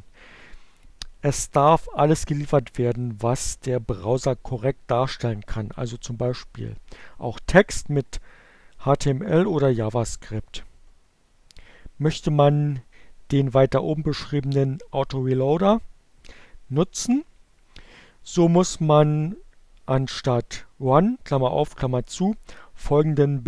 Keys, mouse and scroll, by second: 23.1 click.